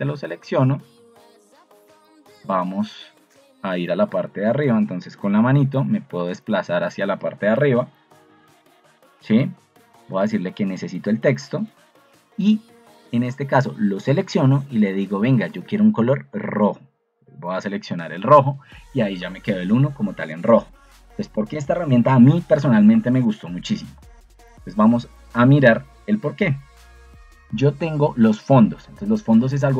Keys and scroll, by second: 7.4 Escape, 20.5 Escape, 21.8 BackSpace.